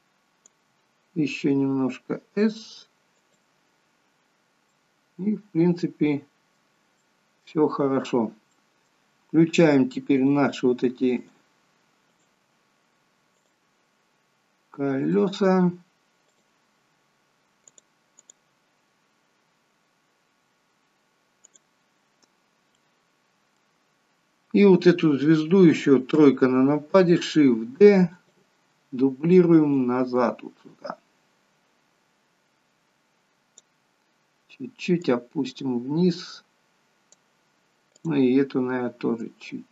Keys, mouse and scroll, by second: 1.7 s, 4.7 middle click, 7.0 shift+middle click, 8.4 middle click, 10.1 click, 11.1 shift+click, 12.2 click, 13.4 click, 15.0 click, 16.2 click, 16.8-17.7 scroll down 2, 17.7 click, 18.3 click, 18.7-19.3 scroll up 2, 19.3-19.9 scroll up 1, 21.5 click, 22.3-22.7 scroll down 1, 22.7 middle click, 26.1 KP_3, 27.8 shift+d, 29.8 click, 35.1 click, 37.9 click, 39.3 click.